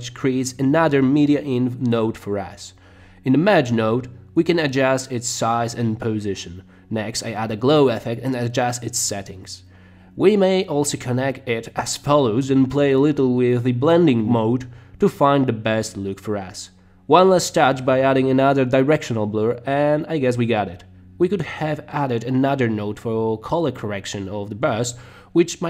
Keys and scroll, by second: 7.2-8.0 typing, 23.9 space.